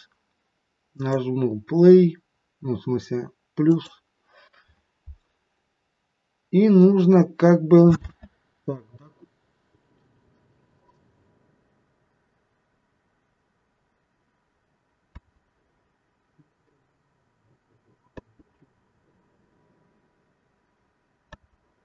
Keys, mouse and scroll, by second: 8.1 space, 15.1 space, 21.4 space.